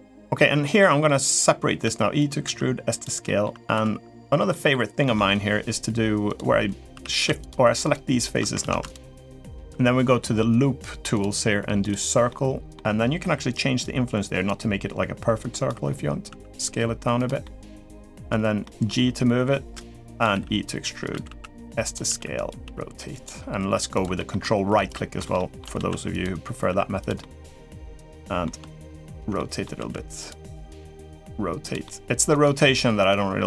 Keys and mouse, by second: 0.5 middle click, 1.6 e, 2.2 s, 3.0 middle click, 3.5 2, 4.2 middle click, 4.8 middle click, 6.1 click, 6.7 3, 6.9 click, 7.2 shift+click, 8.4 ctrl+z, 11.6 click, 12.0 middle click, 13.6-15.4 drag, 16.0 s, 17.2 middle click, 18.4 middle click, 18.8 g, 20.1-23.4 typing, 23.9 middle click, 24.6 ctrl+right click, 25.1 shift+middle click, 25.5 s, 26.4 r, 26.9-28.2 middle drag, 29.1 middle click, 29.5 s, 30.3 middle click, 30.8 r, 31.6 middle click.